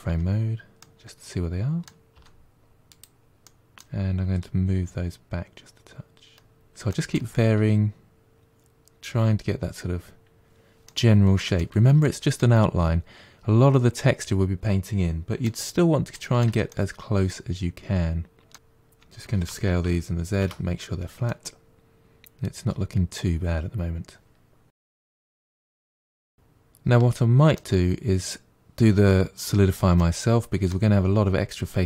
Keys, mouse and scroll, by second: 0.1 KP_Divide, 0.3 KP_Divide, 2.1 z, 2.4 middle click, 3.0 z, 3.6 middle click, 4.2 g, 5.2 middle click, 6.0 click, 6.6 middle click, 7.4 scroll up 2, 7.6 middle click, 7.8 g, 8.5 middle click, 9.1 g, 10.2-11.7 middle drag, 13.6 middle click, 13.9 Tab, 14.0 scroll down 1, 14.2-15.6 middle drag, 15.7 scroll up 1, 15.9 middle click, 16.1 Tab, 16.2-17.3 middle drag, 17.3 click, 17.7 g, 18.2 middle click, 19.2 alt+click, 19.8 s, 20.7-22.0 middle drag, 23.9-25.3 middle drag, 26.0-28.8 middle drag, 29.8-31.8 middle drag.